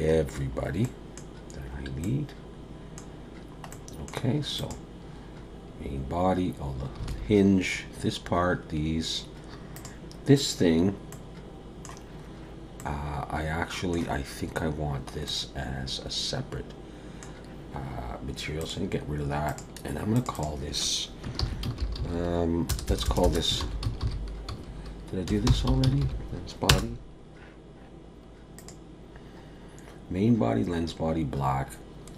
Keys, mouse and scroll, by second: 0.2-0.8 scroll down 3, 0.8 middle click, 1.3-2.0 scroll down 2, 2.0 middle click, 3.2 scroll down 1, 3.7 middle click, 5.0 click, 5.4-6.2 scroll up 2, 7.1 alt+a, 9.7 click, 11.1 middle click, 12.9 middle click, 14.2-15.3 scroll up 1, 15.3 middle click, 18.6 click, 19.5 click, 20.1 click, 20.3 click, 22.9 BackSpace, 23.2 BackSpace, 28.6 click.